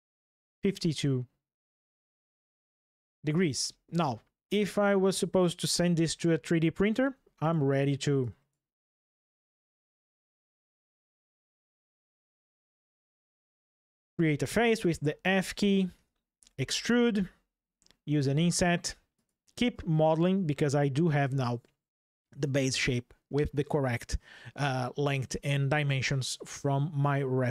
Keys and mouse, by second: 1.5 ctrl+shift+\, 3.3 ctrl+shift+\, 4.4 click, 5.5 Delete, 6.8 Delete, 7.9 click, 9.7 click, 10.5 click, 11.0 Delete, 12.2-13.0 drag, 13.6 f, 14.5 middle click, 15.3 shift+middle click, 15.5 shift+click, 16.1 e, 16.5 click, 18.0 i.